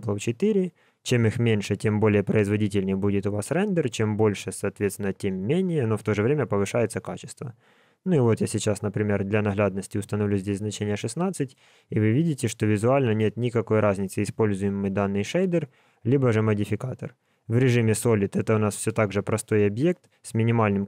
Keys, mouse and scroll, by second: 6.5 click, 17.2 click, 18.3 click, 19.1 Tab, 19.8 click, 20.6 g.